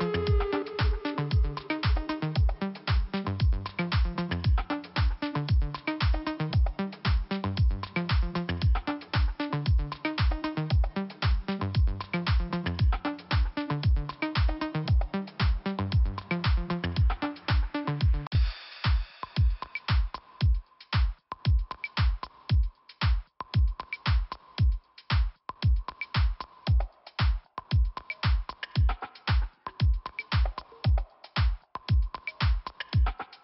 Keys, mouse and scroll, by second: 1.4 click, 2.5 click, 3.9 click, 8.7 click, 10.9 click, 12.5-13.1 scroll down 2, 13.9 click, 15.9 scroll up 1, 17.7 click, 23.2 click, 23.3 click, 23.8 click, 25.2 click, 25.2 click, 28.4 click, 30.9 click, 31.0 click, 31.5 click.